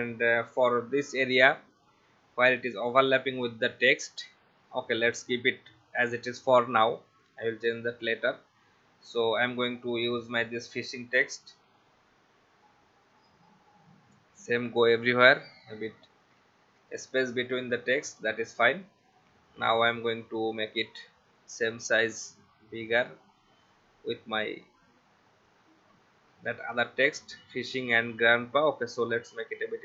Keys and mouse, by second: 6.0 click, 10.1 click, 11.0 right click, 13.2 click, 16.8 right click, 18.1 click, 21.9 shift+click, 25.5 shift+click, 28.9 alt+shift+click.